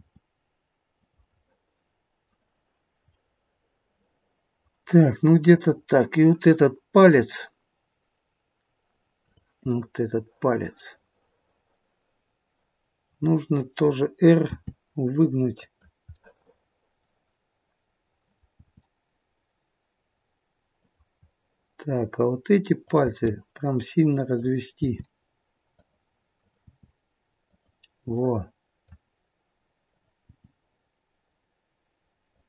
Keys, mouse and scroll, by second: 0.2 r, 1.4 middle click, 3.1 middle click, 9.2 click, 9.7 middle click, 13.1-14.2 scroll down 1, 14.4-16.1 scroll down 1, 14.4 r, 16.1 middle click, 18.2 click, 18.7 r, 21.6 middle click, 22.8 click, 23.3 r, 24.7 r, 26.3 click, 26.8 r, 28.1 middle click, 29.9 click, 30.4 r.